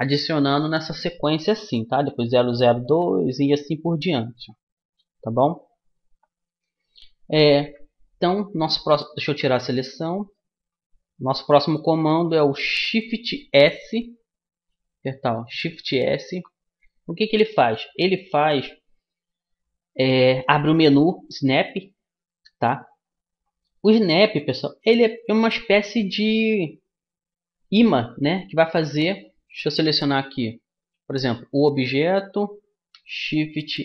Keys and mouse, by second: 9.5 a, 10.5-12.3 middle drag, 15.1 shift+s, 29.3-30.5 right drag, 30.5-32.9 middle drag.